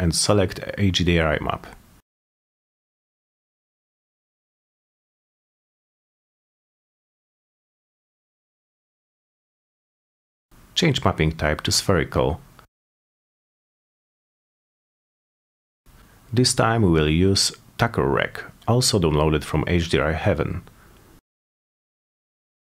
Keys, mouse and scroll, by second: 1.0 click, 2.0 click, 2.7 click, 2.9 click, 4.8 click, 7.5 click, 8.7 click, 9.0 click, 11.0 click, 12.6 click, 14.2 click, 15.6 click, 16.9 click, 17.4 click, 18.3-19.4 drag, 19.6 click, 20.3 click, 21.3 scroll down 1, 21.3 middle click, 21.5 middle click.